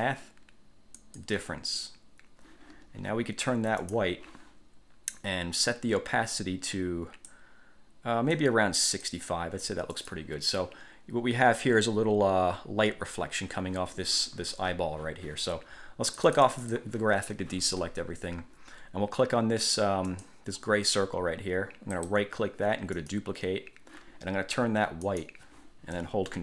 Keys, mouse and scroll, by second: 0.1 click, 1.2 click, 4.0 click, 5.8-6.7 drag, 6.9-7.6 drag, 8.5 click, 10.1 click, 16.2 click, 20.2 click, 22.1 click, 23.1 click, 25.2 click.